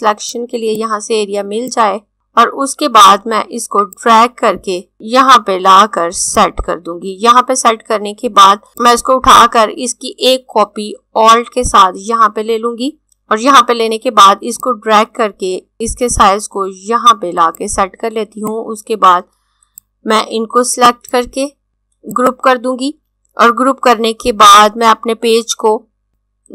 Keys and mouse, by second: 3.9 click, 14.5 click, 20.8 right click, 22.1 click, 26.1 click.